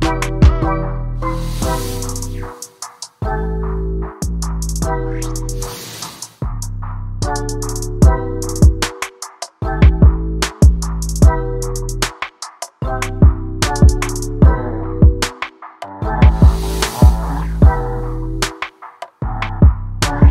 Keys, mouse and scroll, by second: 0.4 n, 0.5 alt+a, 0.8 click, 1.0 ctrl+Tab, 3.7 click, 5.8-6.2 scroll down 10, 6.2 alt+a, 7.6 click, 7.8 scroll up 7, 8.5 click, 9.2 0, 9.6 alt+a, 10.8 click, 11.0 scroll down 2, 11.1 scroll up 1, 11.2 scroll down 9, 11.4 shift+middle click, 11.6 z, 12.4 scroll down 1, 12.5 shift+middle click, 12.9-14.3 scroll up 17, 13.2 shift+middle click, 14.3 shift+middle click, 14.8-15.3 scroll down 3, 15.0 ctrl+right click, 15.3 shift+middle click, 15.8 click, 15.9 shift+a, 17.9-18.9 drag.